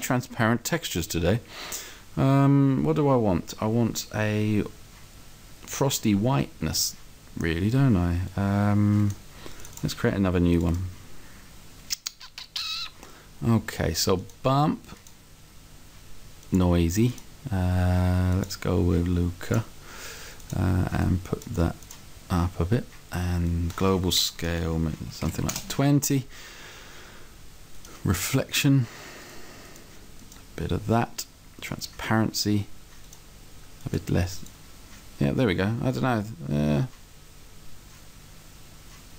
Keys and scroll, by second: 25.3 2, 25.4 0.